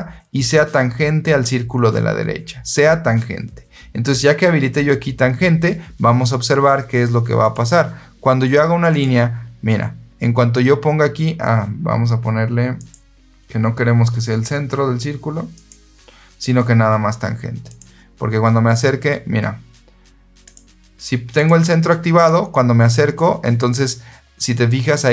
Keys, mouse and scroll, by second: 7.3 click, 8.8 click, 12.7 click, 15.4 click, 17.6 click, 20.4 click, 21.2 click, 22.0 click.